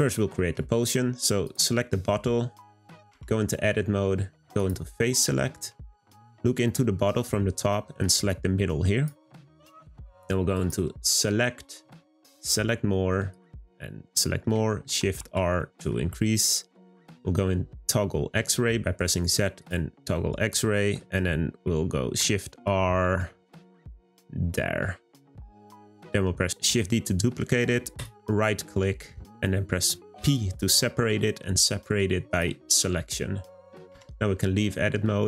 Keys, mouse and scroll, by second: 1.4 click, 1.9-3.1 middle drag, 3.1 Tab, 4.5 click, 5.4-8.0 middle drag, 8.0 click, 10.5-13.6 drag, 14.1 middle click, 14.8 shift+r, 15.2 shift+r, 15.6-17.0 middle drag, 17.0 z, 20.1-22.0 middle drag, 22.0 shift+r, 22.5 shift+r, 23.5-26.5 middle drag, 26.8 shift+d, 34.0 Tab.